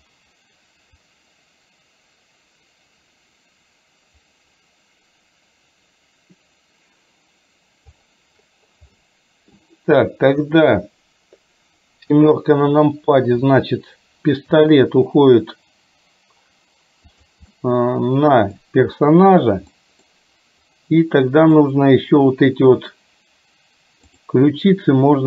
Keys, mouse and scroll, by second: 1.1-8.1 drag, 9.1 middle click, 10.4 click, 12.2 KP_7, 14.7 g, 17.6-18.7 middle drag, 17.6 scroll up 1, 18.6 scroll down 1, 19.8 middle drag, 19.8 scroll up 1, 21.6 click, 24.2 click.